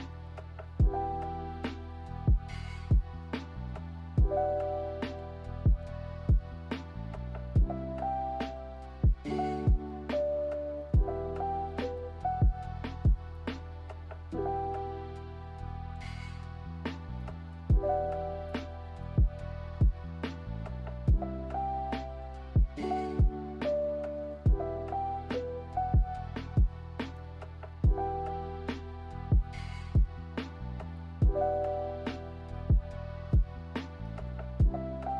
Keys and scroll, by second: 1.9 z, 11.6 z, 16.3 v, 22.1 z, 23.2 d, 33.5 a.